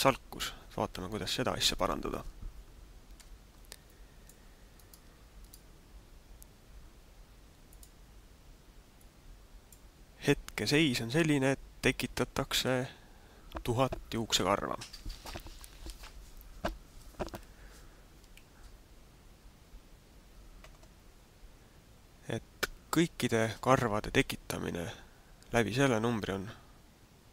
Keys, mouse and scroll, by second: 3.0 Escape, 3.8 middle click, 4.8 right click, 5.4 right click, 7.6 click, 8.9 click.